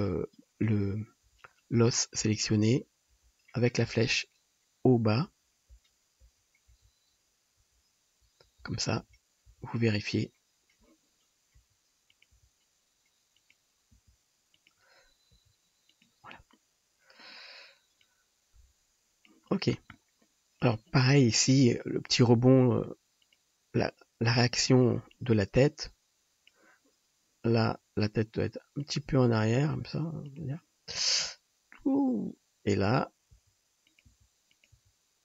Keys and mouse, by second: 1.3 Left, 1.8 Right, 2.3 Right, 2.3 click, 2.8 Left, 3.2 Left, 4.0 Right, 5.3 Down, 5.8 Up, 6.3 Up, 6.7 Down, 7.2 Down, 7.6 Down, 8.3 Down, 8.7 Up, 9.1 Up, 9.6 Up, 11.5 r, 12.4 g, 13.9 g, 15.3 r, 16.0-18.1 drag, 18.1-22.4 middle drag, 22.4 click, 23.4 click, 24.3 KP_3, 27.7 r, 29.0-31.3 drag, 29.2 g, 29.7 r, 33.4 r, 34.1-35.2 drag, 34.1 g, 34.8 r.